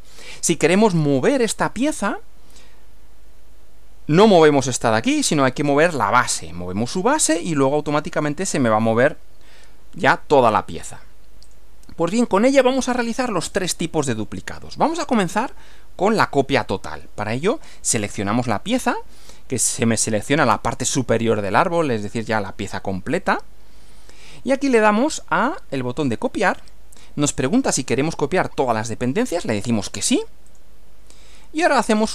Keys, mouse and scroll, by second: 11.5 click, 12.5-14.4 middle drag, 14.9 scroll down 1, 15.4-16.2 middle drag, 18.1 click, 26.4 click, 30.6 click.